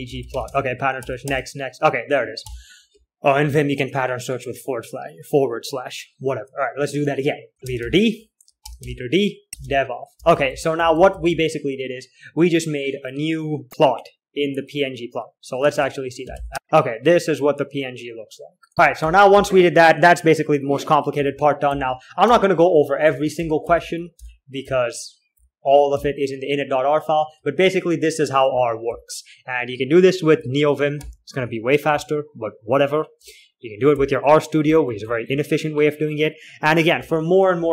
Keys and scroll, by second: 0.0-1.6 typing, 2.8 typing, 8.1-12.6 typing, 16.1 alt+shift+Return, 18.6-20.4 typing, 21.6-28.5 alt+4, 22.0-25.5 typing, 24.5-28.5 alt+3, 27.0 typing, 28.8-36.0 typing, 37.3 typing, 37.3 alt+4.